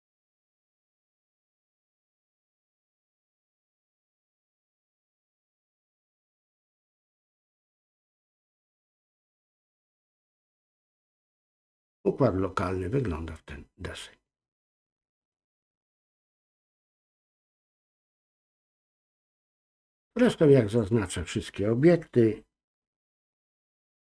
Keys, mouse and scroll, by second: 1.4 ctrl+z, 7.2 click, 8.1-9.7 drag, 15.4-18.9 drag, 20.0 click.